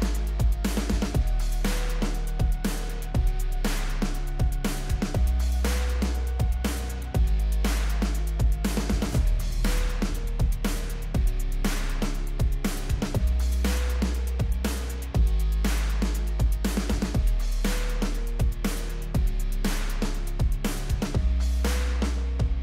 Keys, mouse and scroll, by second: 1.9 s, 2.2-2.7 drag, 6.3 click, 6.8-8.1 drag, 9.4 drag, 12.1 p, 17.1 click, 18.9 shift+r, 19.3 click, 20.2-20.6 drag.